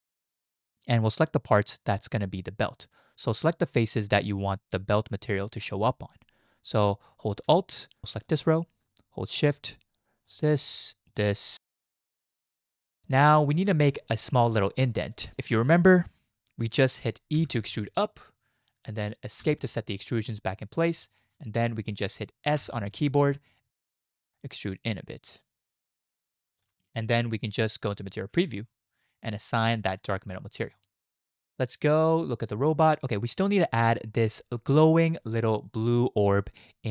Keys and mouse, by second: 8.2 alt+click, 11.1 alt+shift+click, 13.4 shift+middle click, 17.4 e, 22.6 s, 27.9 z, 32.4 click.